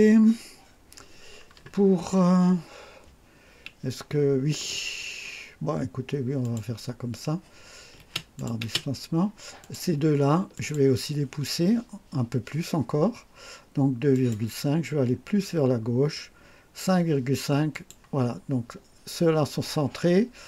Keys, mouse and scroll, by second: 2.3 scroll down 1, 6.4 click, 8.0 space, 8.4 click, 8.7 space, 9.6 click, 10.5 ctrl+click, 14.1 click, 15.1-15.8 scroll down 4, 17.7 click.